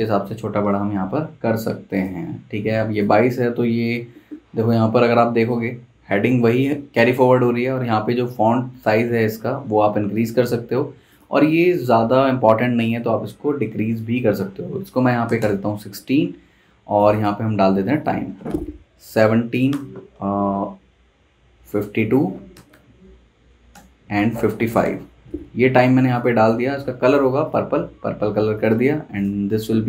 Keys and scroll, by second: 0.9 super+z, 14.7-15.4 typing, 18.2 space, 19.3-20.8 typing, 22.3-24.8 typing, 27.9 Escape.